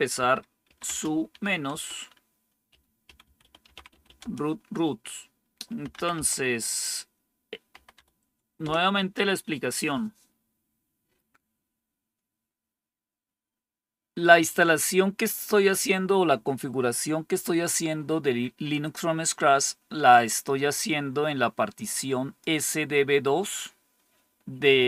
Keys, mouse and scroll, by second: 0.1-4.5 typing, 5.5-8.5 typing, 20.1-22.4 drag.